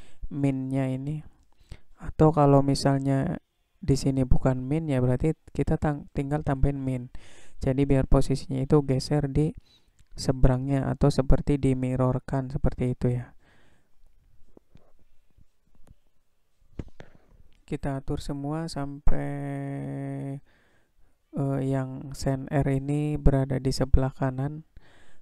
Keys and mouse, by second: 11.7-14.7 drag, 17.2-20.0 drag, 20.5 click, 23.0-25.2 drag.